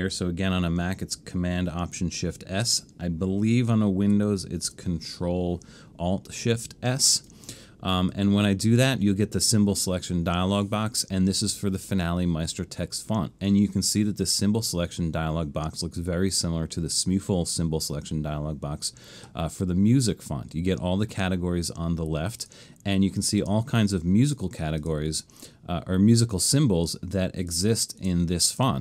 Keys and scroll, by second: 4.2 alt+shift+super+s.